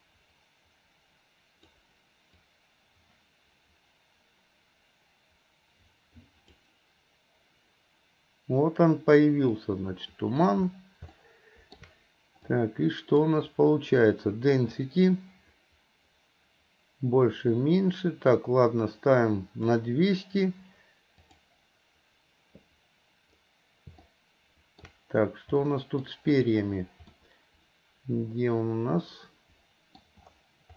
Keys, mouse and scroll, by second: 21.6 click.